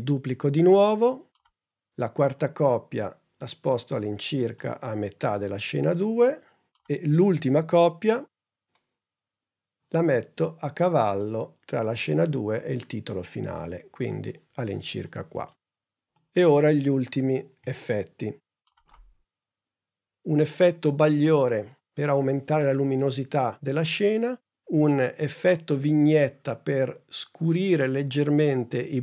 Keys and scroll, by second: 0.4 super+d, 7.8 super+d, 18.9 super+Tab.